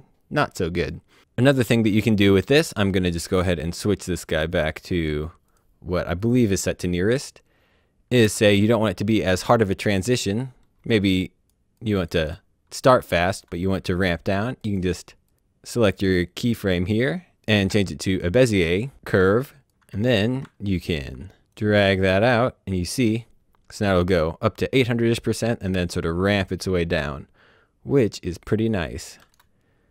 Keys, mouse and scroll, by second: 0.7 click, 1.4 click, 3.1 click, 8.2 space, 10.7 space, 11.0 click, 12.1 space, 14.9 click, 15.1 click, 17.7 click, 19.3 click, 19.8 ctrl+Num_Lock, 19.8-20.5 ctrl+scroll up 3, 21.4 click.